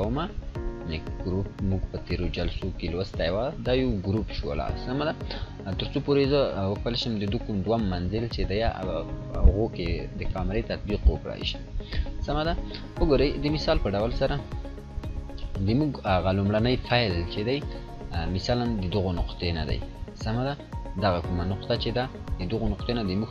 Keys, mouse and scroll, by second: 0.7 click, 3.2-4.4 drag, 5.0 scroll down 1, 13.1-13.7 click, 13.7-15.5 scroll down 1, 15.5 click, 17.9-22.6 drag.